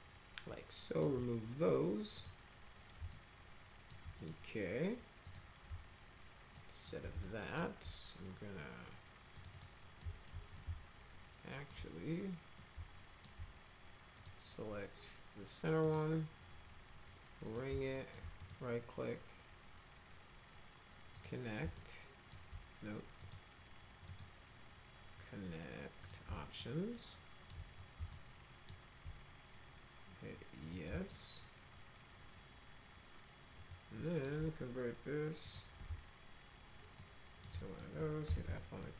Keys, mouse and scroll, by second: 2.1 click, 3.1 alt+middle click, 4.2 middle click, 5.2 click, 6.5 alt+middle click, 7.2 alt+middle click, 9.4 click, 9.5 click, 10.0 alt+middle click, 10.5-11.7 alt+middle drag, 12.6 alt+middle click, 14.1 click, 15.8 click, 17.4 click, 17.9 alt+middle click, 18.4 right click, 21.1 click, 21.7 alt+middle click, 23.2 click, 24.1 right click, 26.0 click, 26.6-27.5 alt+middle drag, 28.1 alt+middle click, 30.6 click, 31.1-34.2 alt+middle drag, 35.4 ctrl+click, 37.0 alt+middle click, 37.6 middle click, 38.0-38.9 typing, 38.8 middle click.